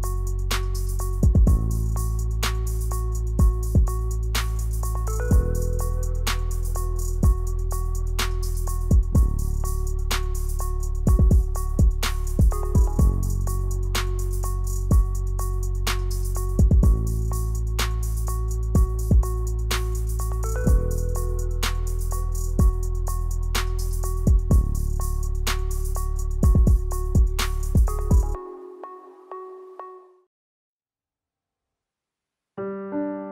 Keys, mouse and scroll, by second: 0.4 click, 1.0 scroll down 1, 1.2 middle click, 2.3 ctrl+z, 2.7 click, 3.4 click, 4.5 middle click, 4.8 shift+middle click, 5.1 middle click, 6.2 click, 7.0 click, 8.1 click, 8.6 click, 8.8 click, 11.9 click, 12.9 ctrl+z, 16.7 click, 18.5 click, 20.3 click, 20.8 click, 22.7 click, 23.4 click, 26.3 click, 26.6-26.9 scroll down 5, 26.8 middle click, 27.5 s, 28.9 middle click, 29.6-30.0 scroll up 5, 29.9 shift+middle click, 30.4 h, 30.8 ctrl+z, 31.0 ctrl+s, 31.7 Tab, 32.0 middle click, 32.7 Tab.